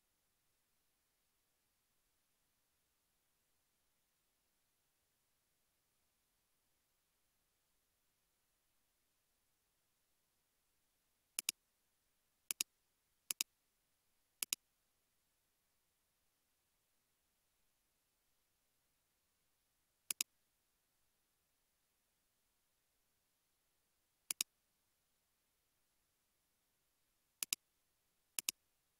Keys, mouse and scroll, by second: 22.2 space, 25.7 space, 26.2 space.